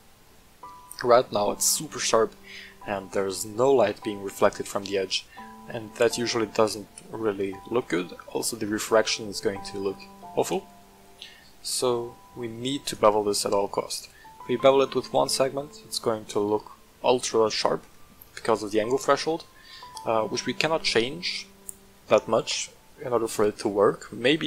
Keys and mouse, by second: 9.8 click, 10.6-12.9 drag, 14.5-15.2 middle drag, 17.8-18.3 shift+middle drag.